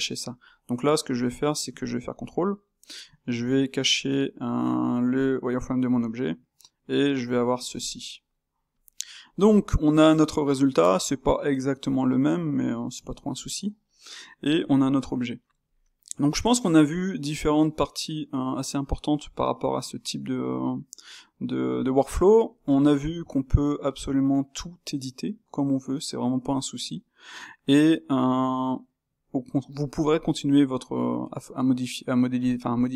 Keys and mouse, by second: 0.3 click, 2.1 shift+q, 5.1 shift+', 6.0-8.7 middle drag, 8.7-9.2 drag, 9.2-32.9 middle drag.